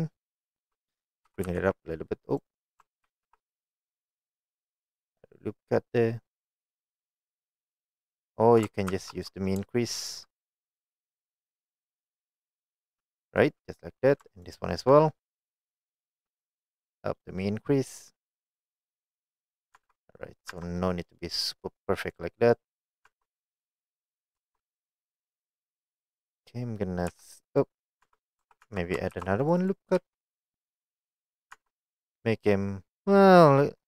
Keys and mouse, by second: 1.3 g, 1.5 z, 2.4 right click, 3.1 ctrl+r, 7.5 right click, 9.1 ctrl+z, 10.8-14.5 drag, 17.3-19.6 drag, 19.7-22.2 drag, 22.8 middle click, 23.2 Tab, 23.5-24.2 middle drag, 24.5 Tab, 27.2 s, 27.6 right click, 28.1 Tab, 28.7 Tab, 29.2 ctrl+r, 30.0 s, 31.5 click, 31.6 Tab, 32.3-33.8 middle drag.